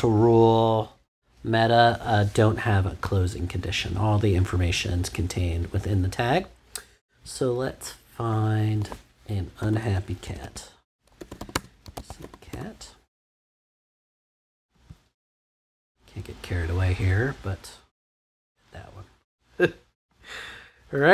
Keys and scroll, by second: 9.3-12.3 typing, 12.5 Return.